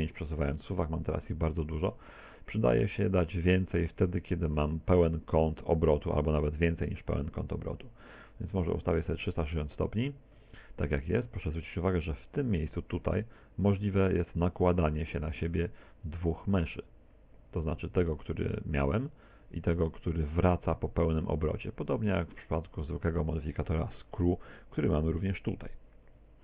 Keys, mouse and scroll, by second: 4.4 click, 11.6-12.1 scroll up 5, 12.1 shift+middle click, 16.1 click, 22.8-23.9 scroll down 5, 23.9 t, 26.1 t.